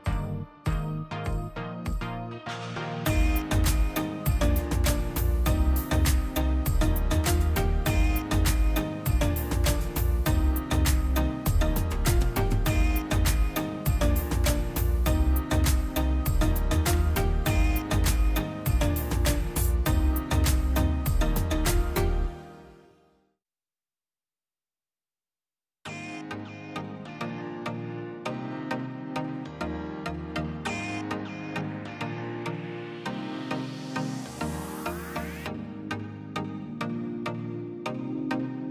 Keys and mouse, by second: 1.0 click, 1.9 middle click, 2.5 click, 2.8 shift+a, 7.5-8.6 middle drag, 8.6 drag, 9.8 ctrl+shift+click, 10.0-10.6 drag, 12.6-14.1 drag, 18.7-20.2 drag, 22.8-24.4 drag, 25.6 click, 26.0-26.4 middle drag, 26.4 ctrl+shift+click, 26.8-27.7 middle drag, 27.7 drag, 29.2-29.7 middle drag, 29.7 click, 30.0 middle click, 30.8-32.1 middle drag, 32.1 click, 32.4 shift+a, 35.8 middle click, 36.0 click, 36.4 click, 36.8 middle click, 36.9 middle click, 37.3 click, 37.5-38.7 middle drag.